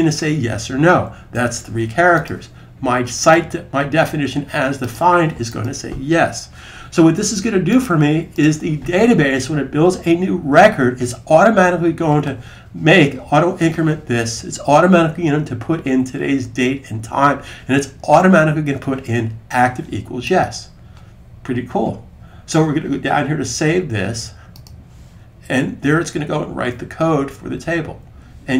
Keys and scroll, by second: 1.1 3.